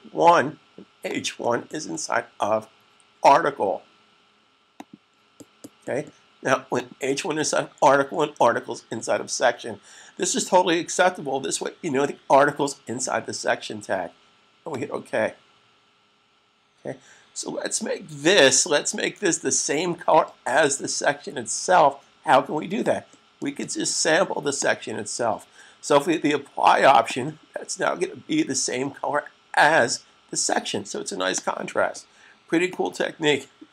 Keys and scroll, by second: 33.4 super+s.